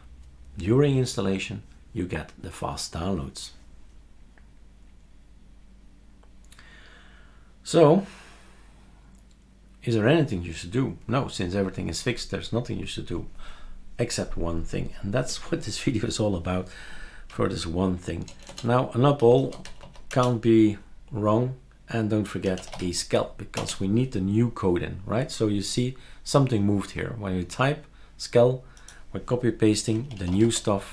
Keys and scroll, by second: 17.3 typing, 18.5-20.3 typing, 22.2-23.3 typing, 23.6 Return, 29.7-30.9 typing.